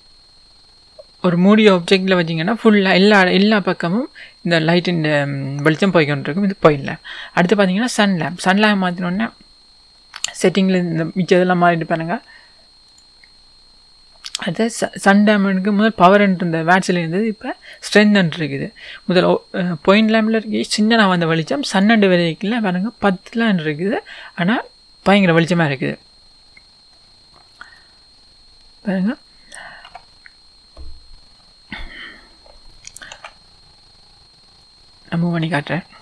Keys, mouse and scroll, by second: 8.3 click, 20.0 click, 21.7 click, 25.4-26.9 scroll down 2, 26.9-29.3 middle drag, 28.1-28.8 scroll up 2, 28.8-29.3 scroll down 2, 29.9-34.6 middle drag, 29.9 KP_1, 31.1-32.4 scroll down 2, 32.4 scroll down 1, 33.4-34.0 scroll up 2, 34.0-34.6 scroll up 1, 34.6 click, 34.8-35.8 middle drag, 35.8-36.0 scroll down 2.